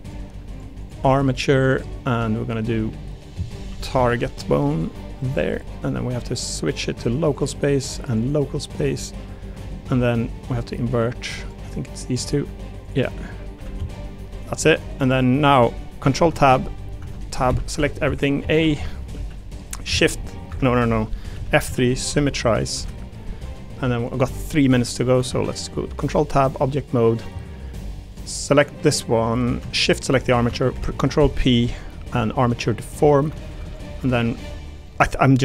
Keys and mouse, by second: 0.1 click, 0.5 click, 0.9 click, 2.5-5.3 drag, 6.4 click, 8.2 click, 10.5 click, 11.3 click, 12.4 r, 13.2 middle click, 13.5 r, 13.7 z, 14.5 middle click, 15.1 click, 16.2 ctrl+Tab, 17.5 Tab, 17.5 q, 19.1 a, 20.0 shift+n, 21.3 F3, 22.2 m, 24.9 click, 25.3 ctrl+Tab, 27.1 click, 28.1 click, 29.2 click, 29.9 shift+click, 30.7 ctrl+p, 32.8 click, 34.8 click.